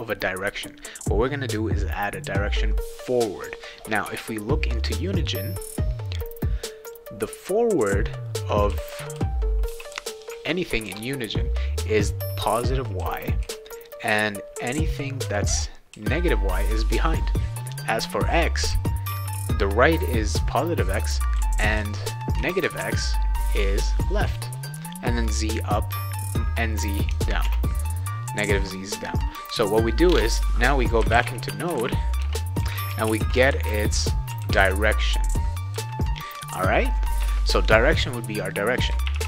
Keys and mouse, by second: 4.4 click, 4.8 click, 6.8 click, 7.7 click, 8.2-11.1 right drag, 8.7-10.9 typing, 12.0-14.6 right drag, 12.3-13.9 typing, 14.9-16.6 right drag, 15.2 a, 15.9 s, 18.4 right click, 18.7 d, 19.1 s, 21.2-24.0 right drag, 21.4 a, 21.7 s, 22.3 q, 22.8 a, 27.4 alt+Tab, 30.7-35.1 typing, 37.2 Return, 38.8-39.2 typing.